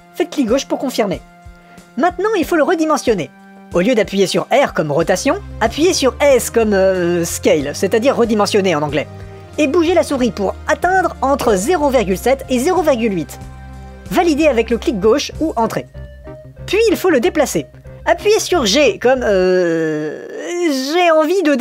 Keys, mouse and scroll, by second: 6.2 s, 18.7 g.